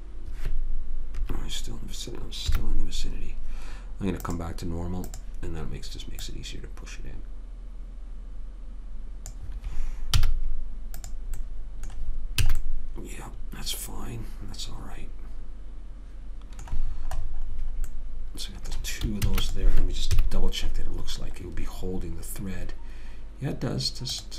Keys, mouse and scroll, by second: 1.5 KP_3, 2.9 KP_1, 4.6 click, 6.6 click, 10.5 z, 11.8-13.1 middle drag, 12.8 a, 17.2-19.6 middle drag, 19.6 ctrl+s, 20.5 KP_3.